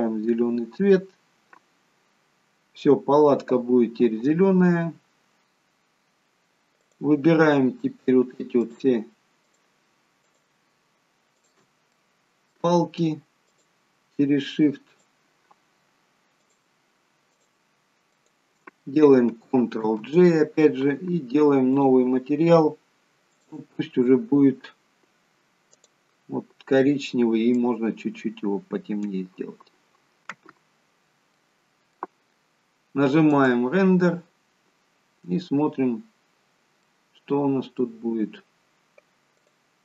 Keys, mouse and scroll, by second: 5.4 scroll down 1, 6.0-6.3 scroll up 2, 6.8 click, 8.7 shift+click, 11.9 middle click, 13.4 shift+click, 15.0 shift+click, 19.8 ctrl+j, 21.7 click, 23.3 click, 30.8-31.4 scroll down 1, 31.4 middle click, 31.4 scroll down 1, 35.3 click, 35.9-36.3 scroll up 1, 36.3-36.8 scroll down 1, 36.8 middle click, 39.4 click.